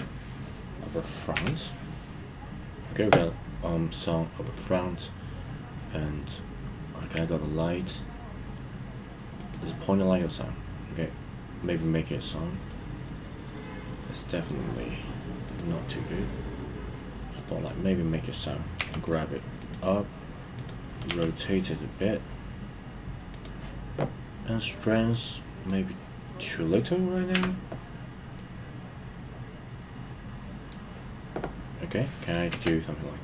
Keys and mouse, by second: 1.5 KP_3, 7.0 click, 9.3 click, 12.6-14.5 middle drag, 15.4 click, 17.3 click, 19.7 g, 20.6 click, 21.9 r, 24.8 click, 27.3 KP_1, 28.3-30.7 middle drag, 32.5 space.